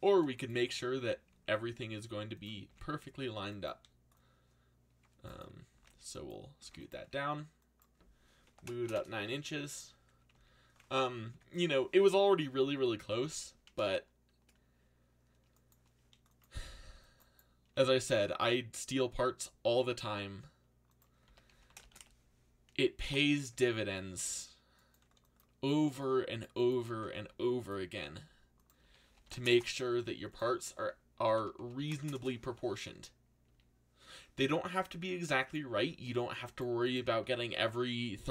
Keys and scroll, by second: 0.0-0.2 typing, 0.6 Return, 2.7 z, 3.7 c, 5.4-7.2 typing, 8.4 9, 8.8 shift+', 8.9 Return, 10.3 z, 13.1 z, 15.9 c, 17.4-18.4 typing, 21.0-22.4 typing, 23.0 Return, 25.0 c, 26.7-33.4 typing, 35.7 z, 37.2 f.